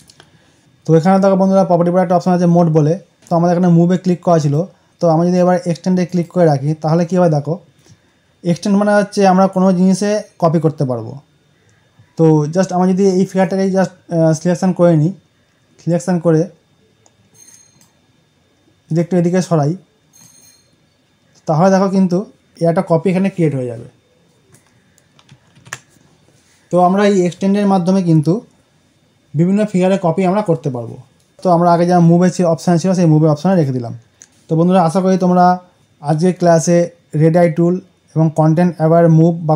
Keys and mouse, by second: 3.1 click, 5.9 click, 13.3-23.7 drag, 25.2 click, 25.4 ctrl+d, 31.3 click, 33.4 click, 34.2 right click.